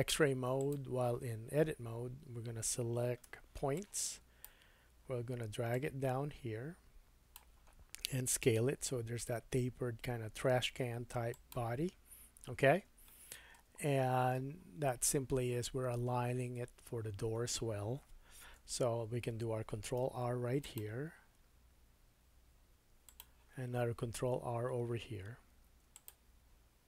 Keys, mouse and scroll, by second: 3.3 1, 8.2 s, 11.5-14.4 middle drag, 13.8-14.4 scroll up 2, 20.0 ctrl+r, 25.5 ctrl+r.